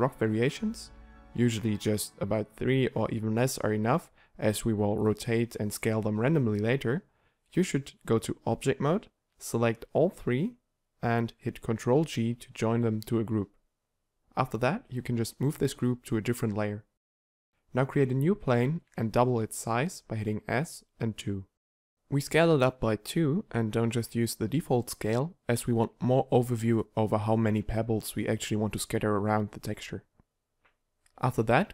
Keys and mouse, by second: 0.1 ctrl+a, 1.9 ctrl+z, 8.8 g, 9.8 click, 10.1 right click, 11.0-12.0 right drag, 12.0 ctrl+g, 12.7 t, 13.9 g, 15.1 m, 17.7 shift+a, 19.1 s.